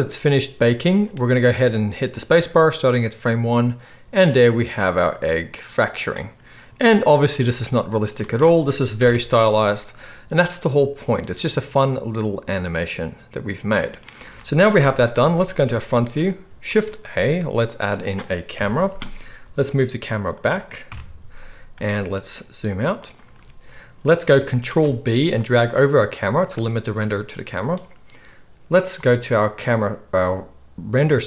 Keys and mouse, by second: 2.1 space, 7.4 space, 9.0 shift+Left, 9.4 space, 14.2 space, 14.7 KP_1, 16.6 shift+a, 18.5 KP_3, 19.4 g, 20.4-29.0 middle drag, 20.8 KP_0, 21.7 g, 24.6 ctrl+b, 29.0 click, 29.2-31.2 middle drag.